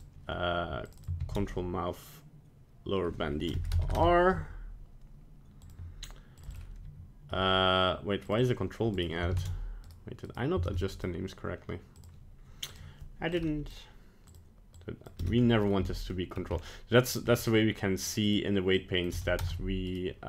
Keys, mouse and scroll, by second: 0.9 click, 1.0 click, 5.6 click, 6.4 click, 6.5 click, 8.4 click, 9.4 ctrl+Tab, 10.3 right click, 10.7 ctrl+Tab, 11.0 right click, 12.0 click, 12.9 click, 16.1 middle click, 16.5 scroll up 4, 17.1 right click, 17.4 middle click, 18.0 click, 18.3 click, 19.9 right click.